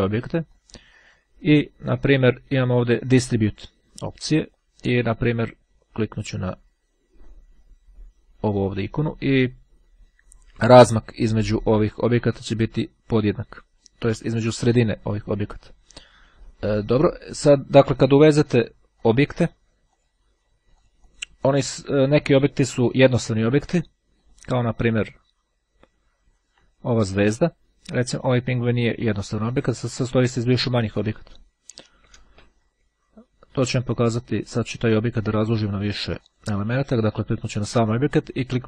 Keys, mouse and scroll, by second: 5.5-9.3 drag, 16.3 click, 19.1-20.1 drag, 20.9-22.4 drag, 22.9 click, 24.3 click, 25.3-26.9 drag, 28.7 click, 29.5 click, 31.0 click, 32.4 Delete, 34.7-35.1 ctrl+scroll up 2, 35.1-35.7 ctrl+scroll down 2, 35.7-36.1 ctrl+scroll down 1, 36.3 ctrl+click.